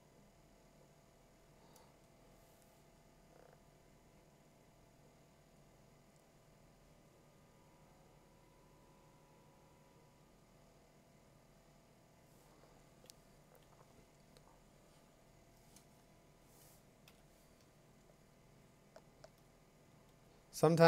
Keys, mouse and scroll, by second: 1.1 click, 1.9 Tab, 5.4 click, 5.8 click, 7.0 click, 8.5 click, 9.1 click, 11.9 click, 17.1 b, 18.9 alt+f, 19.2 click, 20.5-20.8 drag.